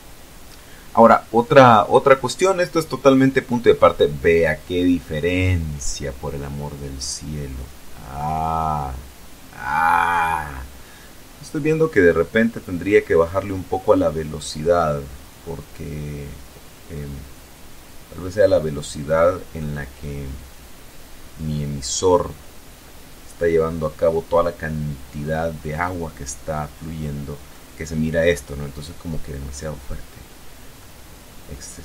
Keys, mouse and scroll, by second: 18.7-21.4 middle drag, 21.6-22.2 scroll up 1, 25.2-26.8 middle drag, 28.0 middle click, 29.0-29.3 scroll down 2, 30.0-31.8 drag.